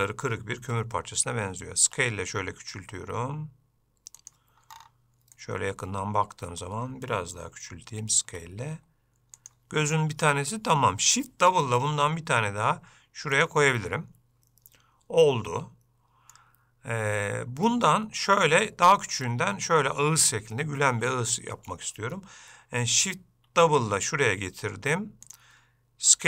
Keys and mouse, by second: 5.6-6.8 middle drag, 11.8 shift+d, 13.9-16.5 middle drag, 23.7 shift+d.